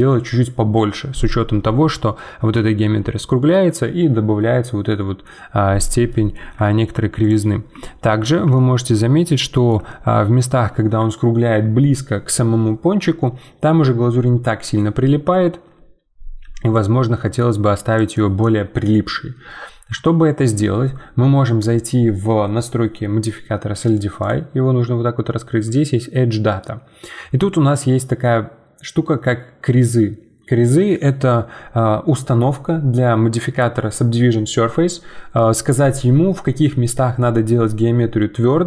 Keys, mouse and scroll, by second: 1.4 scroll down 1, 1.7 middle click, 2.2-2.6 scroll down 2, 2.6-5.9 shift+middle drag, 6.1-7.2 middle drag, 7.2 click, 7.5-7.8 scroll up 1, 7.8 shift+middle click, 8.3 scroll up 2, 8.5 shift+middle click, 9.0 scroll up 1, 9.3-13.0 middle drag, 16.6 d, 16.7 d, 18.0 d, 18.0 d, 18.1 right click, 18.4 d, 18.5 d, 23.8-38.6 drag.